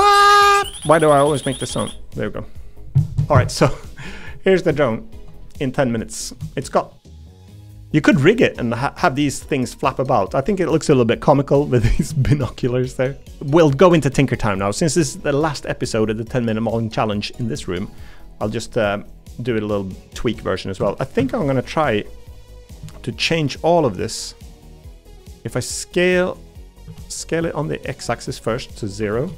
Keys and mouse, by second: 4.7 shift+middle click, 5.7 middle click, 6.5 shift+middle click, 6.9 middle click, 8.3-10.1 middle drag, 12.2 shift+middle click, 12.6 middle click, 13.1 middle click, 13.3 ctrl+s, 20.8 Tab, 21.2 a, 22.9 shift+middle click, 25.1 s, 26.8 s.